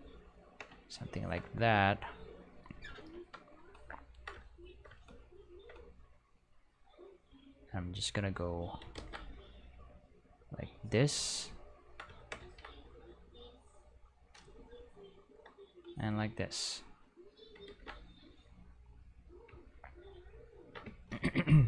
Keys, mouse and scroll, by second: 3.1 Home, 7.6-8.6 drag, 9.0 ctrl+z, 9.6 click, 13.3 click, 16.7 click, 17.7 ctrl+z.